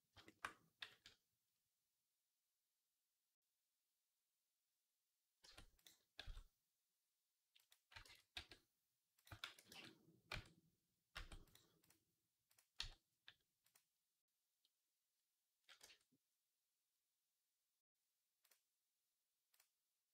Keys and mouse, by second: 5.3 Tab, 5.7-7.8 middle drag, 6.1 s, 7.9 ctrl+z, 8.2 s, 9.3 ctrl+a, 10.1 Tab, 11.0 Tab, 11.3 click, 12.3-13.5 drag, 13.5 Tab, 13.6-19.4 drag, 15.7 Tab, 19.4-20.1 drag.